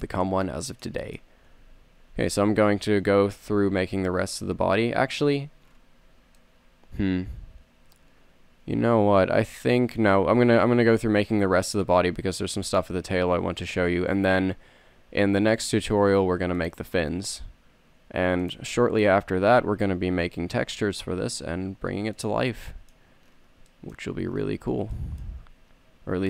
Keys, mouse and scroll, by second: 1.8 z, 2.7 z, 3.0 Tab, 4.1 z, 5.5 z, 10.4 z, 11.6 c, 13.9 e, 16.8-18.0 drag, 17.2 s, 19.6 g, 22.4-24.1 drag.